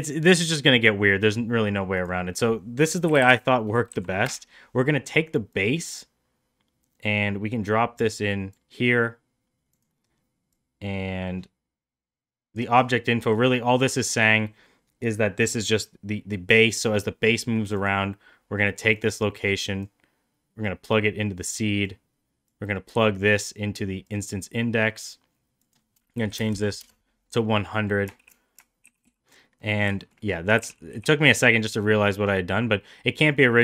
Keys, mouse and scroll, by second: 2.1-4.8 drag, 5.5-8.5 drag, 10.5-12.6 drag, 13.2 click, 18.9 click, 20.6-21.9 drag, 22.5-24.1 drag, 25.7-27.3 drag, 26.5 KP_0, 27.7 middle click, 28.8 shift+d, 29.6 middle click, 30.0 shift+middle drag, 30.2 middle click, 30.6 g.